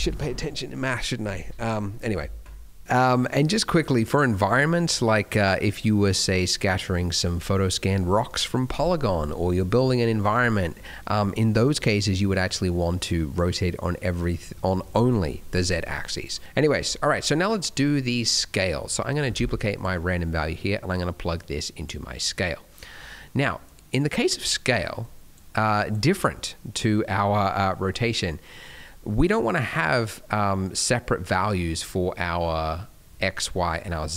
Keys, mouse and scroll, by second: 1.6 middle click, 1.9-2.6 scroll down 2, 3.9-5.1 scroll up 2, 16.5 middle click, 16.6-17.0 scroll down 2, 17.0 middle click, 17.6 middle click, 18.7 middle click, 19.1 click, 19.3 shift+d, 20.2 middle click, 20.8 click, 22.4 middle click, 22.7 scroll up 1, 22.9 middle click, 23.2-23.6 scroll down 1, 23.6 click, 24.9 click, 25.7 click, 26.1 scroll up 2, 26.7 middle click, 27.1 middle click, 27.7 middle click, 28.3 middle click, 28.8-29.2 scroll up 1, 29.2 middle click, 29.4 scroll down 1, 29.6 middle click, 30.5 middle click, 33.8 middle click.